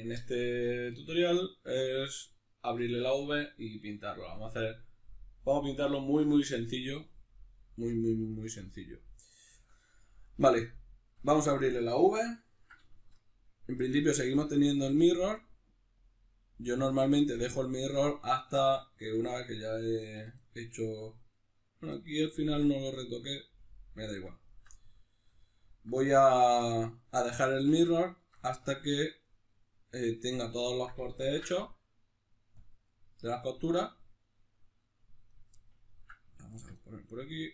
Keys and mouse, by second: 9.4 Tab, 14.4 click, 16.0-18.0 drag, 18.0-24.4 middle drag, 20.1 2, 24.4 alt+right click, 24.8 middle click, 25.4 alt+right click, 26.0-28.0 middle drag, 28.0 alt+shift+right click, 28.4-35.3 middle drag, 31.2 ctrl+e, 35.3 right click, 35.6 ctrl+middle click, 36.5 ctrl+right click, 36.8-37.5 middle drag.